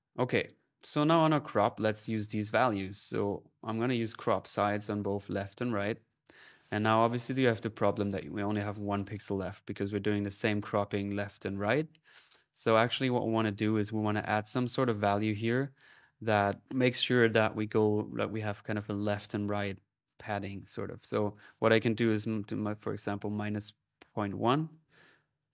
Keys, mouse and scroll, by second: 0.4-2.5 drag, 3.0-5.1 drag, 5.8 click, 7.0 middle click, 9.7-11.3 drag, 12.3 click, 12.9 click, 14.1 click, 15.6 click, 21.0 click, 24.0 click, 24.5-25.5 drag.